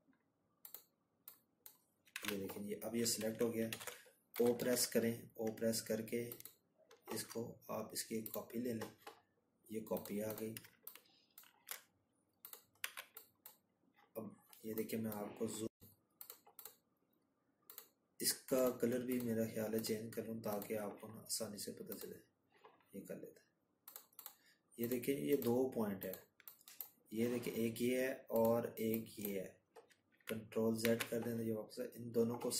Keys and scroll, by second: 8.7 z, 26.7 ctrl+z, 27.7 ctrl+z.